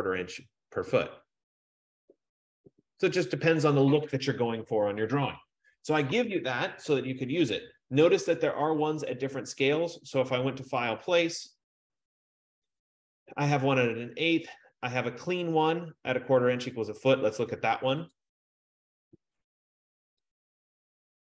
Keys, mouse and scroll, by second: 0.4 click, 9.2 click, 11.1 click, 18.3 click, 20.6 click.